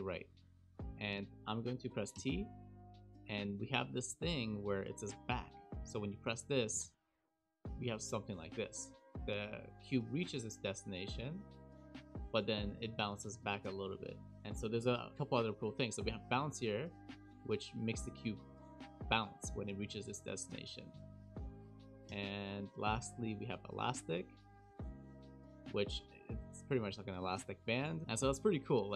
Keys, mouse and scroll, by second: 0.5 shift+middle click, 2.1 t, 6.9 click, 12.7 click, 14.0 click, 14.8 t, 19.3 click, 20.7 click, 21.1 click, 22.0 click, 22.8 t, 24.3 click.